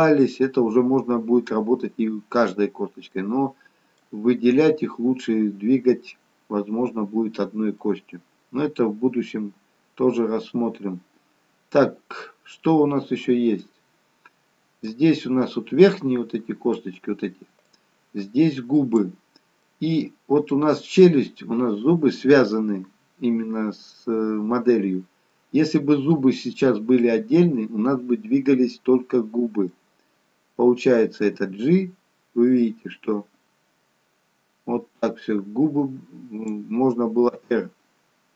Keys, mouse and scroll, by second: 3.3 middle click, 7.3-7.8 scroll up 1, 7.8 middle click, 14.8 middle click, 17.7 click, 19.8 middle click, 25.4 middle click.